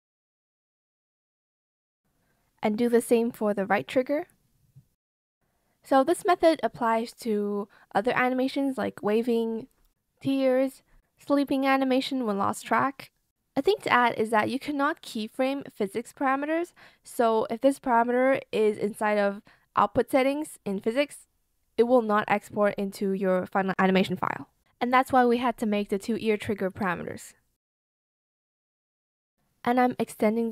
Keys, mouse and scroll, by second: 28.5 alt+scroll, 29.3 scroll, 30.4 scroll.